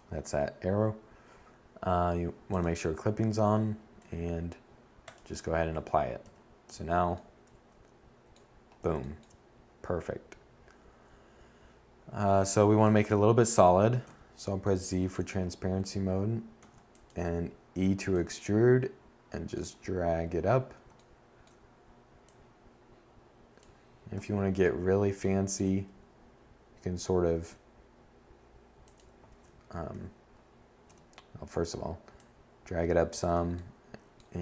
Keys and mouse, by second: 1.9-3.2 middle drag, 3.8 Tab, 4.3 a, 4.8 a, 11.0 2, 12.2 z, 14.7 e, 22.3 7, 24.0 z, 25.4 s, 27.4 z, 28.0 1, 29.0 z.